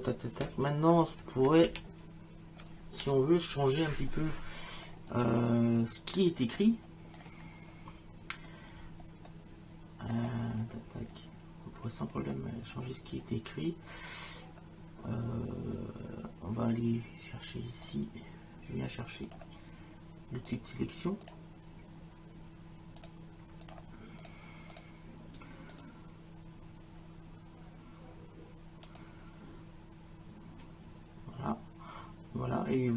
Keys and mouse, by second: 1.7 ctrl+alt+z, 9.3 middle click, 17.8 click, 19.3 click, 20.5 click, 23.0 click, 28.9 click.